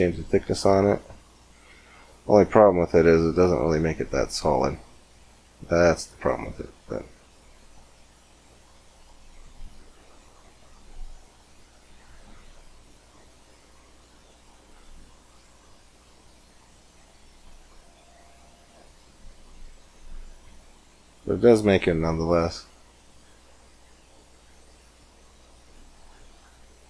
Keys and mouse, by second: 0.5-2.1 middle drag, 7.5-9.7 drag, 9.7-10.9 middle drag, 10.9-12.6 drag, 12.8 middle click, 13.1-19.1 drag, 19.1-21.4 middle drag, 22.9-24.5 drag, 24.5 middle click, 26.2 middle click.